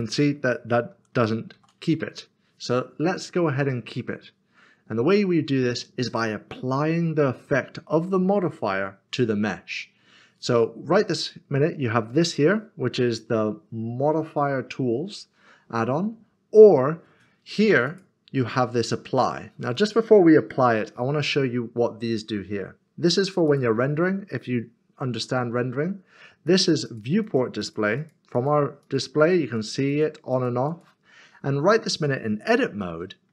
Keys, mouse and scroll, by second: 0.0 g, 0.1 click, 1.5 ctrl+z, 17.9 click, 23.1 click, 23.5 double click, 26.4 double click, 32.8 middle click.